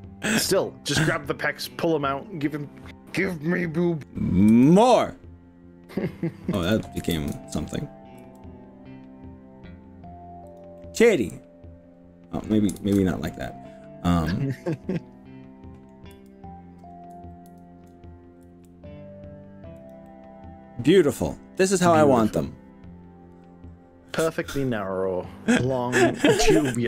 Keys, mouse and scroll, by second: 4.6 g, 6.6 click, 6.8 right click, 7.2 ctrl+z, 8.3 g, 10.6 click, 10.8-12.2 middle drag, 12.4 middle click, 12.8 ctrl+z, 14.3-16.0 middle drag, 16.2 h, 17.6 ctrl+z, 18.5 g, 19.8 click, 20.1-20.8 middle drag, 20.8 middle click, 21.6-24.4 middle drag, 25.0-26.8 middle drag.